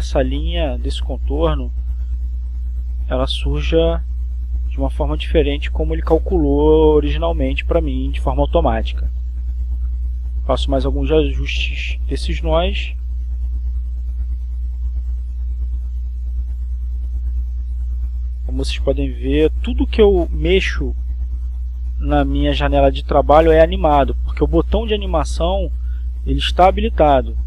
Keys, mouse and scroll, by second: 2.0-3.2 drag, 3.4 click, 5.0-6.6 drag, 7.1-12.0 drag, 12.6-14.0 drag, 14.1 click, 16.2-21.1 drag, 22.3-25.0 drag, 25.2-27.4 drag.